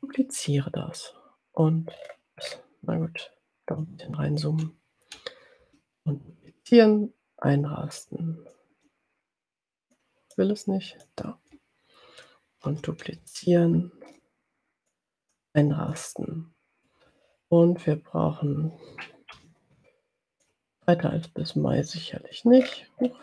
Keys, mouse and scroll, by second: 0.1 ctrl+d, 0.5-2.1 ctrl+drag, 2.1-2.8 ctrl+scroll up 4, 3.8-4.6 ctrl+drag, 5.6 ctrl+d, 6.4-10.1 ctrl+drag, 10.6 click, 12.7 ctrl+d, 13.7-15.2 ctrl+drag, 15.6 click, 17.2-17.9 ctrl+scroll down 2, 19.3 ctrl+d, 20.4-22.8 ctrl+drag, 23.0-23.2 ctrl+scroll up 2.